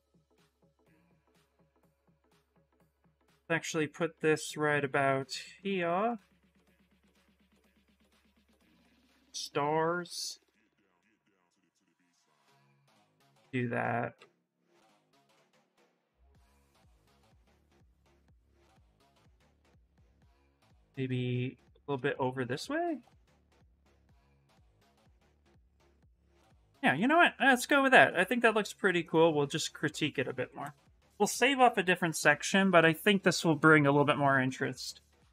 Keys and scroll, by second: 2.1 w, 13.9 q, 16.3 ctrl+z, 16.4 ctrl+z, 19.5 w, 23.9 q.